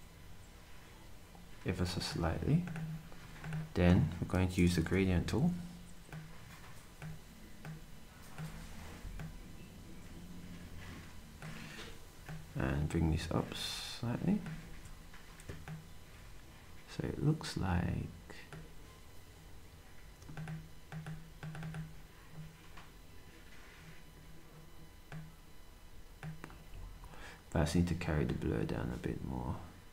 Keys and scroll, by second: 4.8 g, 14.6 s.